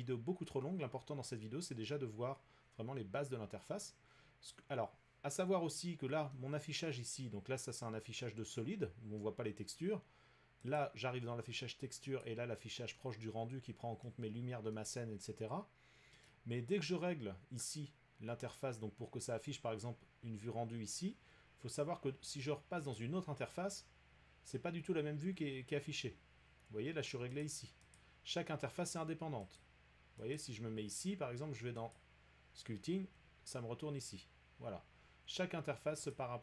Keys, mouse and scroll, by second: 8.5 middle click, 9.8 middle click, 10.8 click, 12.2 click, 14.0 middle click, 16.2 middle click, 22.9 click, 27.4 click, 27.9 click, 29.6 click, 30.3 click, 31.9 click, 36.1 click.